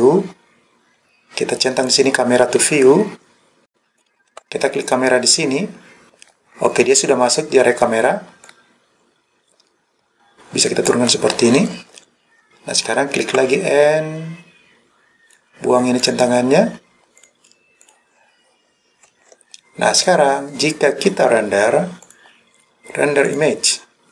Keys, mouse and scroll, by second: 1.9 click, 3.9 click, 4.3 n, 4.9 click, 8.5 click, 13.4 n, 16.1 click, 17.2 click, 17.9 click, 19.1 n, 22.1-24.1 drag.